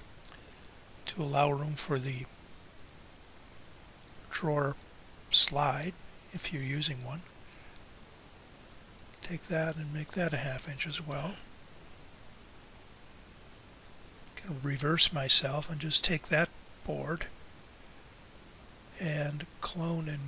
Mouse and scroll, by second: 7.0-12.0 drag.